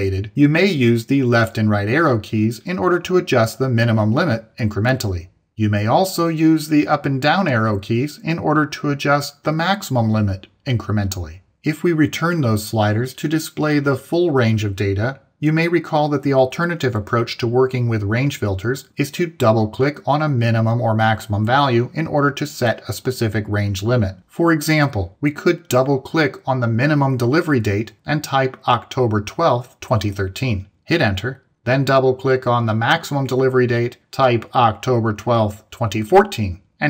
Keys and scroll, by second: 0.7 Right, 4.2 Left, 6.4 Down, 10.3 Up, 30.2 Return, 36.3 Return.